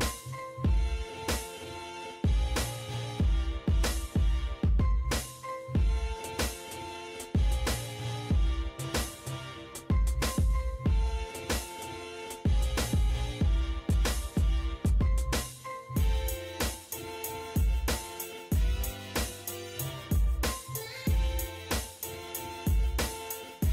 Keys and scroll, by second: 4.6 Escape, 11.7 m, 12.0 space, 14.4-15.3 typing, 16.2 Escape, 21.2 space.